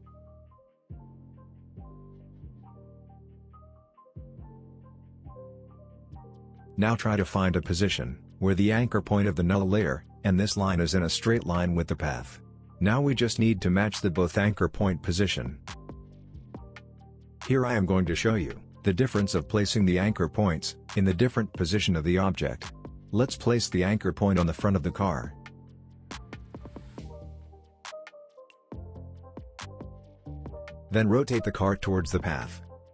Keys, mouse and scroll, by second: 2.4-2.8 alt+scroll down 1, 4.7-5.1 alt+scroll up 1, 5.1 alt+scroll down 1, 6.4-8.3 drag, 8.4-8.8 alt+scroll up 1, 9.5 space, 9.9-10.2 click, 10.0 space, 11.6-14.5 drag, 17.4 click, 23.9-27.1 drag, 30.6 r, 31.2 r, 31.8-32.9 drag.